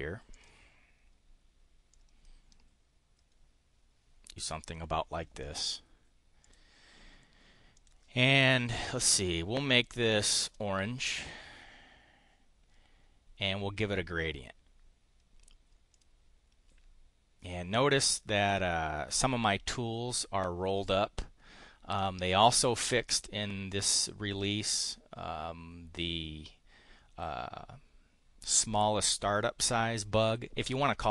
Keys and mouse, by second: 0.3 click, 1.9-4.8 drag, 6.3 click, 7.8 click, 9.8 click, 11.1 click, 15.9 click, 22.0 click.